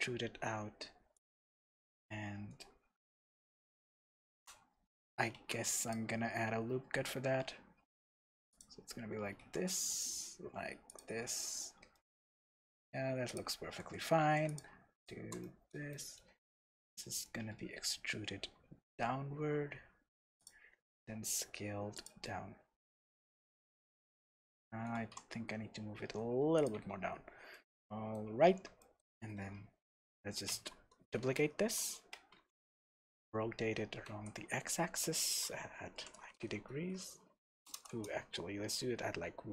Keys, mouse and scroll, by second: 1.2 click, 1.6-8.6 middle drag, 3.4-3.8 scroll up 1, 4.7-5.4 scroll down 1, 5.4 ctrl+r, 8.6 click, 8.8-9.4 scroll up 1, 9.4 ctrl+r, 11.0 click, 11.3 Tab, 11.9-13.3 middle drag, 13.3 click, 14.2 3, 14.5 click, 15.0 shift+click, 15.4-20.5 middle drag, 16.4 e, 20.5 click, 20.8 s, 22.1 click, 22.2-26.7 middle drag, 25.0 g, 26.7 click, 26.7 Tab, 26.9-27.5 scroll down 2, 27.5-31.6 middle drag, 28.4-30.5 scroll up 3, 30.5 shift+d, 31.8 Escape, 32.4 r.